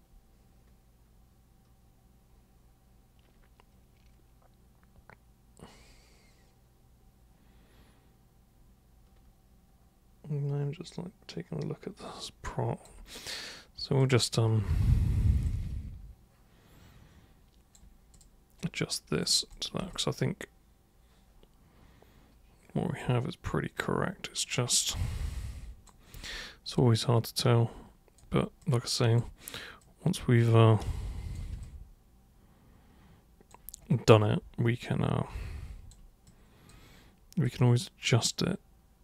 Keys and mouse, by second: 14.0 super+click, 15.5-17.7 alt+super+drag, 18.1 super+click, 18.6 super+right click, 19.5 super+click, 19.9-23.0 alt+super+drag, 23.8 super+right click, 25.0-25.9 super+drag, 26.1 super+w, 26.6 super+click, 28.6-29.2 super+drag, 29.8 super+click, 31.6-33.5 alt+super+drag, 34.8-35.9 alt+super+drag, 36.2-36.7 super+drag, 37.5 super+click.